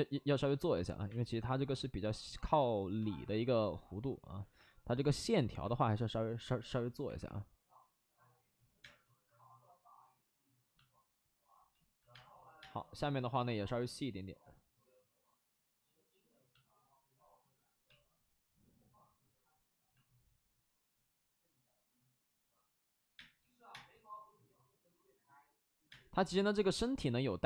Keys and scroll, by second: 1.0 3, 5.2 3, 7.0 3, 7.1 3, 8.7 space, 12.0 space, 12.5 space, 23.1 space, 23.7 space, 25.8 space.